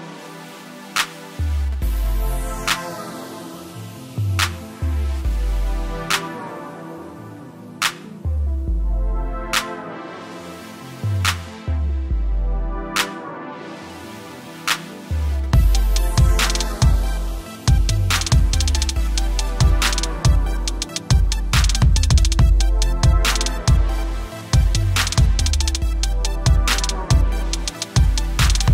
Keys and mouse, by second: 0.1 alt+click, 1.1 click, 2.4 alt+click, 2.7 Return, 2.9 =, 3.2 click, 3.5 t, 3.9 click, 4.8 Return, 5.2 click, 6.0 click, 7.9 Left, 8.9 z, 10.2 click, 15.2 click, 25.6 -, 25.7 click, 28.6 right click.